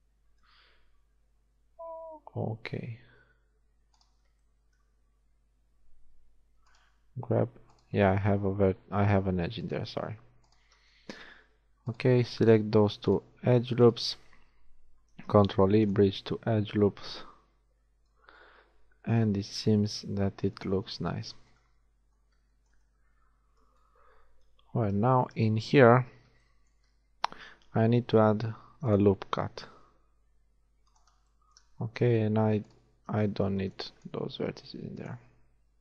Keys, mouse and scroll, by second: 2.6 g, 5.1 g, 7.4 shift+g, 9.6-11.9 drag, 11.5 g, 15.3 ctrl+e, 16.9 z, 18.2 a, 24.4 KP_1, 25.5 z, 28.2 ctrl+r, 31.9-34.3 typing, 32.7 click.